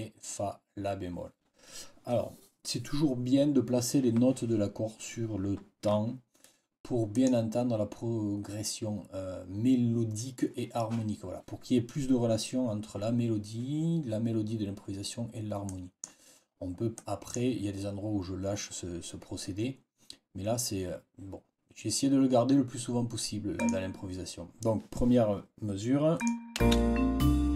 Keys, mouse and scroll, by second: 7.0 click, 15.5 click, 16.9 click, 23.5 click, 26.1 click, 26.5 space.